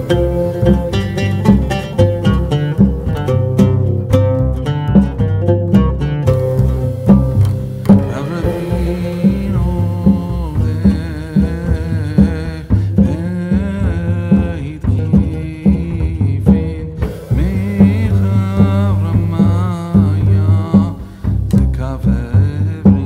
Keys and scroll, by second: 6.7 a, 11.5 a.